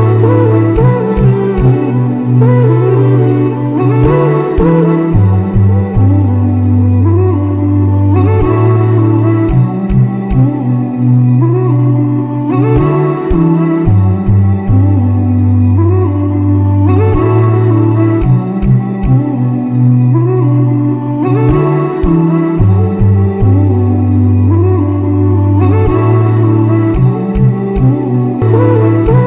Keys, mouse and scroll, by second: 0.1-1.9 drag, 1.9 Tab, 3.2 a, 6.0 alt+s, 11.2-13.5 right drag, 13.5 click, 14.9-18.5 drag, 21.2-21.9 scroll up 1, 21.9-23.3 scroll up 4, 23.3 Tab, 23.9-24.5 scroll down 4, 25.2 click, 26.0-29.1 drag.